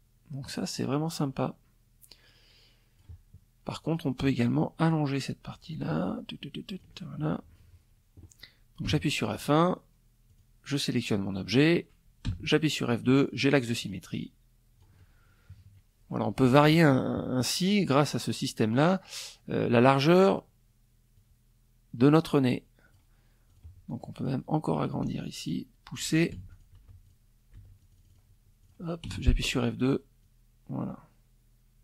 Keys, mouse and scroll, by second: 2.3 click, 3.0 click, 4.2-5.5 ctrl+drag, 7.4 F1, 7.7 click, 8.8 click, 10.8 F2, 12.3-13.5 drag, 14.0 KP_Subtract, 14.9 middle click, 15.4 middle click, 16.8-18.6 drag, 19.7-21.6 drag, 22.0 click, 22.4 click, 23.5-24.7 ctrl+drag, 24.9 ctrl+F1, 25.0 ctrl+click, 25.3 ctrl+F2, 25.6 ctrl+click, 26.1 ctrl+F1, 26.3 click, 27.1 click, 27.6 F2, 28.7-31.8 drag.